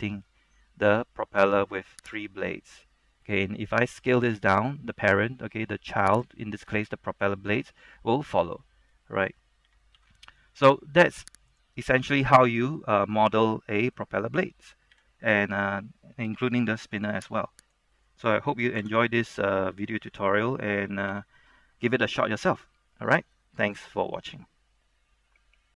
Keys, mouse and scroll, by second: 0.3 middle click, 2.3 right click, 2.6 scroll down 1, 2.8 middle click, 4.1 s, 6.3 click, 6.5-7.1 scroll up 1, 7.8 middle click, 9.8-10.1 typing, 11.6 right click, 11.9 shift+middle click, 12.5 middle click, 15.1 r, 17.8 right click, 18.2 middle click, 18.9 KP_0, 19.9-20.3 scroll down 1, 20.3-21.3 scroll up 1, 21.3 F12.